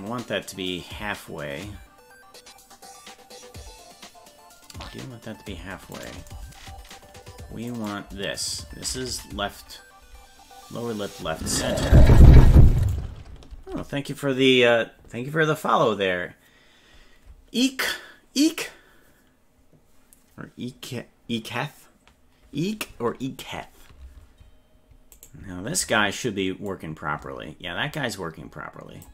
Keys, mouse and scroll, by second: 6.1 right click, 7.8 right click, 11.5 ctrl+Tab, 12.4 Tab, 12.9 right click, 13.6 ctrl+Tab, 25.3 right click, 26.7-29.1 drag.